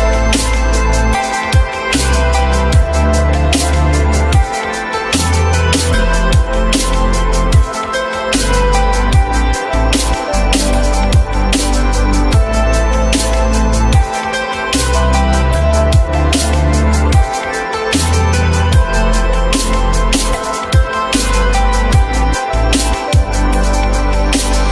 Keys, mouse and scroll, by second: 1.4 alt+middle click, 4.9-5.4 typing, 5.7 Return, 7.0 alt+middle click, 7.8 alt+middle click, 9.7 alt+middle click, 11.1 alt+middle click, 12.2 alt+middle click, 12.9 alt+middle click, 13.0 alt+middle click, 13.1 alt+middle click, 13.1 alt+double middle click, 14.2 r, 15.9 r, 18.3 BackSpace, 18.5 BackSpace, 21.4 r, 22.2 alt+middle click.